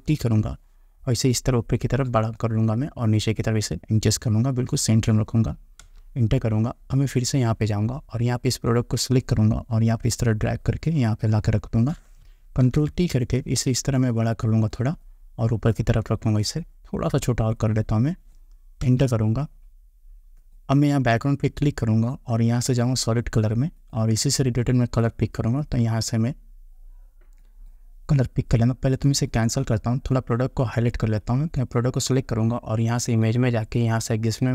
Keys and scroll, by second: 0.3 ctrl+t, 6.0 Return, 19.0 Return.